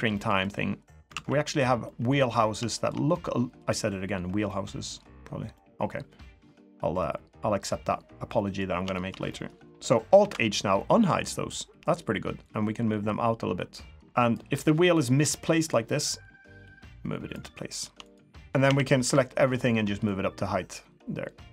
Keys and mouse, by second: 0.1-0.4 middle drag, 1.1 alt+z, 1.8 middle drag, 2.1 click, 2.7 shift+drag, 3.1-3.6 drag, 4.4 click, 5.5 click, 6.4 drag, 6.6-7.0 middle drag, 8.3 click, 8.4 middle click, 8.9-9.3 shift+drag, 9.3 middle click, 10.2 alt+h, 10.7 middle click, 10.8-11.3 drag, 12.5 click, 13.9 Tab, 14.5 l, 15.2 KP_3, 16.5 click, 18.4 Tab, 18.6 a, 19.0 KP_3, 20.1-21.5 drag.